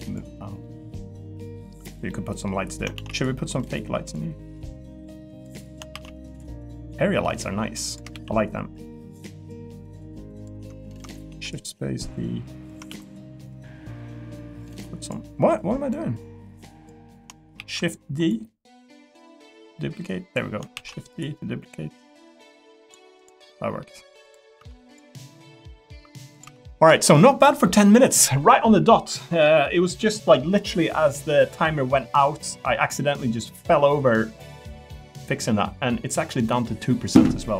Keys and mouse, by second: 0.6 middle click, 2.1 middle click, 2.9 shift+d, 6.0 shift+d, 7.4 click, 8.1 ctrl+z, 11.3 shift+d, 12.9 ctrl+z, 13.6 click, 15.9 click, 17.6 shift+d, 20.7 shift+d, 21.7 click, 23.5 middle click, 24.5 Tab, 24.9 click, 25.2 middle click, 26.4 click, 26.4 Tab.